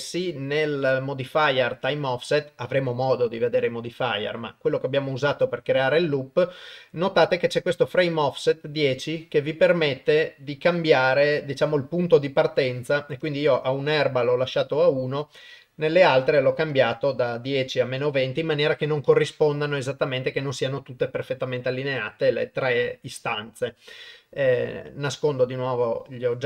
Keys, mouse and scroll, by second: 8.9 click, 13.3 click, 24.7 click.